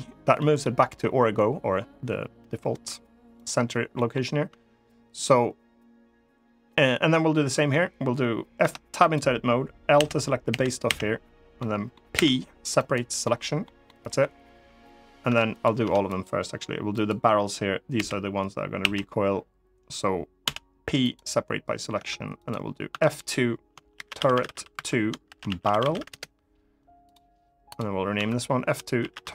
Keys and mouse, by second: 0.1 middle click, 3.6 middle click, 8.3 Tab, 8.8 click, 9.7 l, 10.2 l, 10.6 l, 11.3 click, 11.8 p, 12.9 click, 13.6 click, 15.0 Tab, 15.5 Tab, 15.8 click, 17.7 l, 18.5 l, 20.1 p, 21.7 Tab, 22.2 click, 22.6 F2, 24.1 r, 25.5 r, 27.4 click, 27.9 F2, 29.1 r.